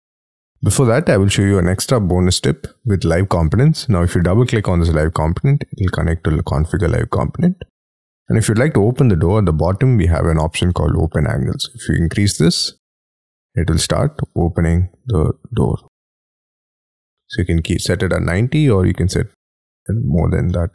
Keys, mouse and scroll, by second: 0.6 scroll down 1, 0.6 middle click, 1.7-2.1 scroll down 4, 2.1-2.8 scroll up 9, 4.2 double click, 17.7 double click, 20.4 middle click, 20.5 scroll down 1.